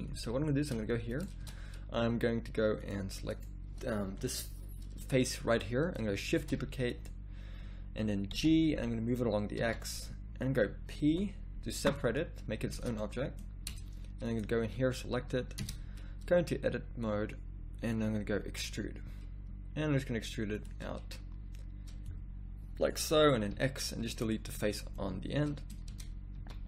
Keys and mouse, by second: 1.1 right click, 1.5 Tab, 6.4 shift+d, 8.4 g, 11.1 p, 13.8 Tab, 14.3-15.6 drag, 15.6 Tab, 16.4 a, 17.0-18.5 drag, 18.5 e, 22.0-23.5 drag, 24.3 x, 25.9 Tab, 26.3 a.